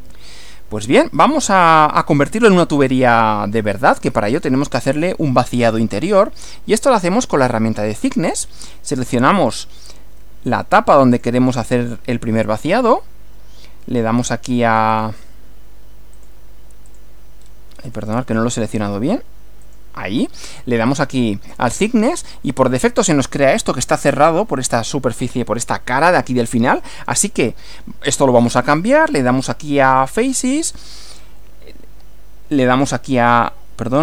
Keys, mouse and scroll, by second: 2.3 scroll up 2, 9.4 click, 11.2 click, 14.9 click, 16.1 click, 16.9 click, 17.4 scroll up 1, 18.2-18.7 shift+middle drag, 18.7 shift+scroll up 1, 19.7 click, 20.9 click, 22.1 scroll down 1, 29.1 click, 32.7 click, 33.9 click.